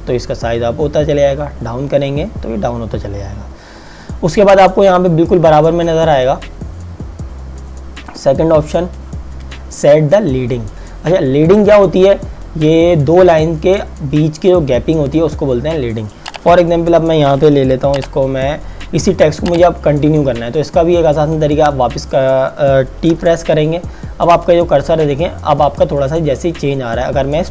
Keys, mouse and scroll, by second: 0.9-2.8 scroll down 1, 2.8 scroll up 1, 23.2 typing.